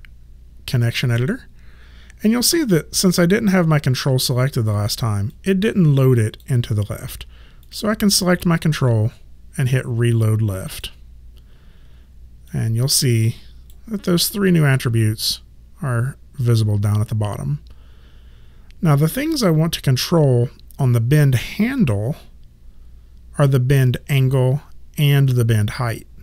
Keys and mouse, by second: 5.3 click, 7.7 click, 10.7 click, 21.8 click.